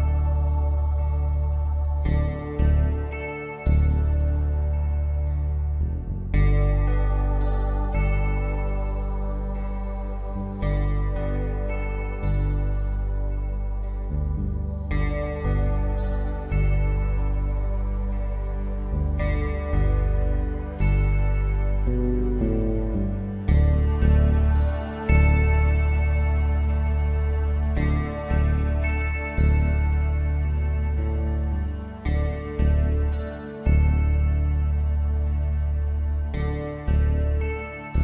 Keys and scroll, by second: 2.9 v, 7.7 space, 10.2 ctrl+t, 13.1 Return, 17.3 ctrl+0, 18.9 ctrl+s.